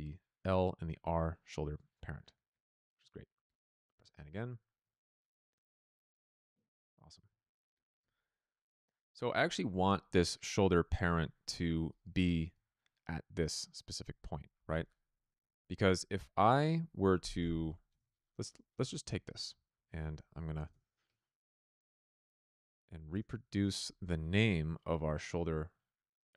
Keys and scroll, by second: 3.9 n, 17.1 Tab, 20.5 BackSpace, 20.6 Return, 22.6 Return, 23.0 BackSpace.